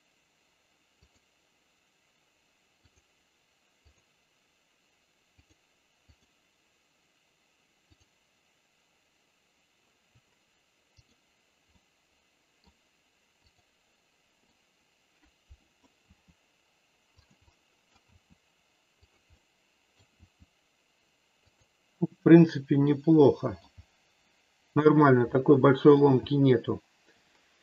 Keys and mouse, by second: 2.9-4.0 drag, 5.4 click, 7.9-9.8 drag, 11.6-12.6 middle drag, 14.4-15.6 middle drag, 16.0 r, 17.1 click, 17.4 middle click, 18.0 r, 19.4 middle click, 22.0-23.5 middle drag, 25.4 middle click.